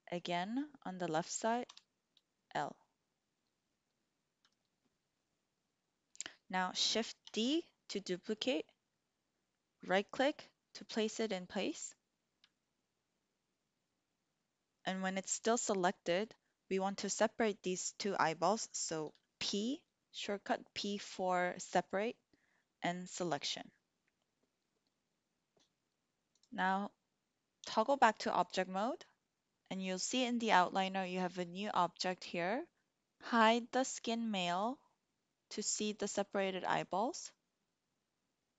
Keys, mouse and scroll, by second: 1.6 l, 7.3 shift+d, 9.8 click, 19.3 p, 26.2 click, 27.6 Tab, 31.9 click, 34.5 click.